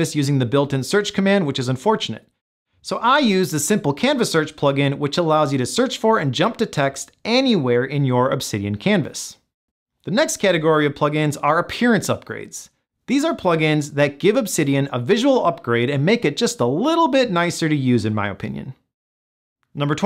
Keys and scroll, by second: 3.8 ctrl+super+f.